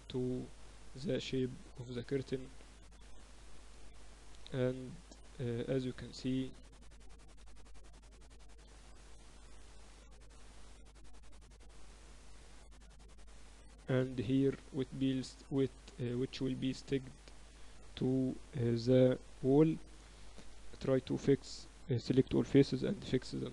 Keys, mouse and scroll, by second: 3.2 ctrl+z, 5.0 Tab, 5.2 middle click, 5.7 Tab, 8.4 a, 9.8 g, 13.3-14.4 right drag, 14.3 click, 14.4-15.4 middle drag, 15.4 click, 16.6 Tab, 16.8 click, 17.3 Tab, 17.6 Tab, 19.4 Tab, 20.1 a, 20.6 ctrl+n, 21.6 a, 22.0 a, 22.8 ctrl+n, 23.0 Tab.